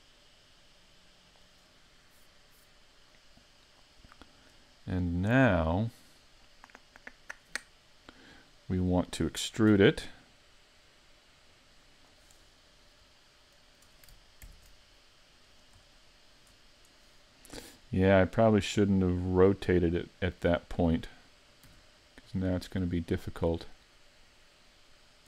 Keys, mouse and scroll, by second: 4.4 right click, 11.6 click, 11.6 e, 13.1 scroll up 3, 24.4 click, 24.4 r.